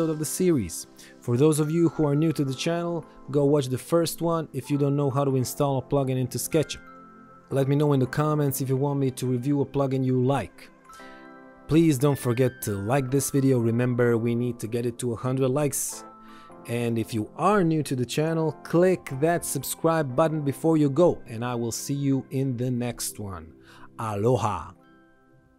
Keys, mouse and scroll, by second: 0.6 ctrl+z, 1.4 ctrl+1, 6.0 click.